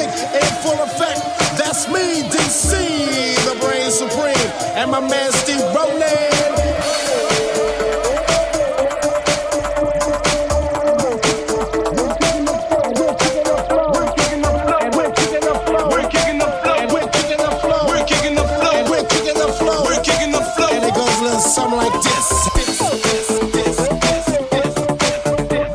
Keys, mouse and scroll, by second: 7.2-10.6 middle drag, 10.6-25.7 drag, 13.6 Tab, 14.6 3, 15.1 alt+middle click, 15.1 alt+right click.